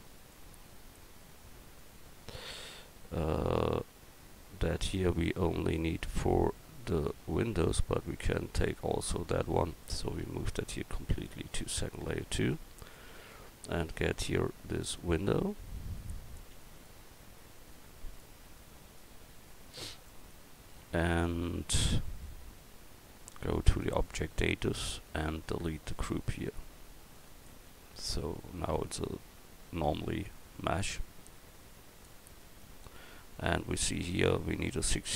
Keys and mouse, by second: 9.8 right click, 10.2 m, 13.9 right click, 15.0 KP_1, 16.7 middle click, 20.1 middle click, 28.7 right click, 29.5-30.6 right drag, 31.2-32.9 drag, 33.4-34.3 drag.